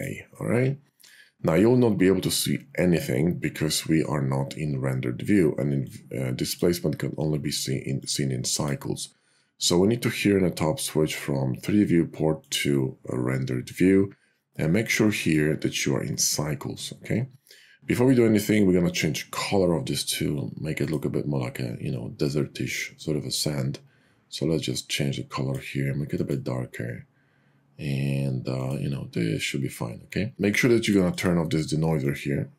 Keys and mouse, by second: 5.9 click, 7.9 click, 12.9 click, 15.2 click, 31.1 click, 32.1 click.